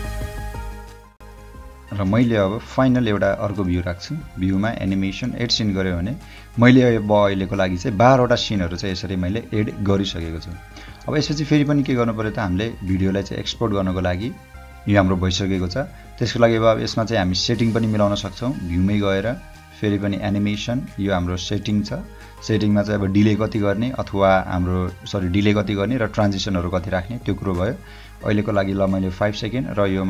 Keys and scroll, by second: 0.6 space, 1.2 space, 8.4 o, 11.0 space, 11.8 space, 12.9 o, 13.8 space.